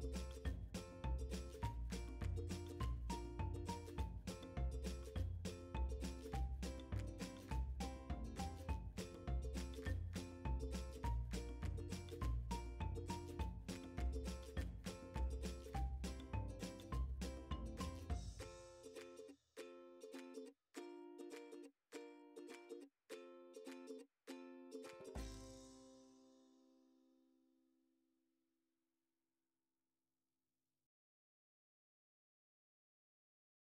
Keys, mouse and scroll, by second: 2.9 r, 3.5 right click, 7.0 click, 9.6 shift+middle click, 10.0 scroll up 1, 10.6 g, 14.7 scroll down 1, 15.2-16.4 shift+middle drag, 16.4 g, 21.4 a, 21.8 scroll down 1, 22.0 middle click, 23.4 middle click, 24.6-25.8 middle drag, 25.8 click, 26.3 click, 27.0 scroll down 2, 27.3 middle click, 28.1-28.5 scroll up 2, 28.5-32.6 middle drag.